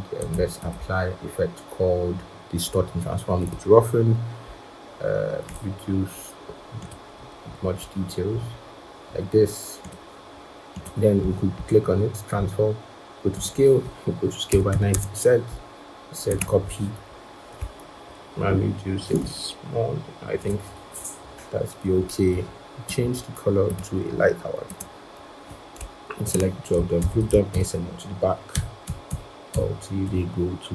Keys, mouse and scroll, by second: 0.5 double click, 7.1 Down, 7.3 Down, 7.7 Down, 8.2 Down, 8.3 Down, 11.1 right click, 14.4-15.5 typing, 14.8 Tab, 18.9 shift+click, 26.1 shift+click, 26.9 ctrl+g, 27.4 ctrl+[, 28.4 ctrl+[, 28.7 ctrl+[, 28.9 ctrl+[, 29.4 ctrl+[, 29.9 ctrl+[.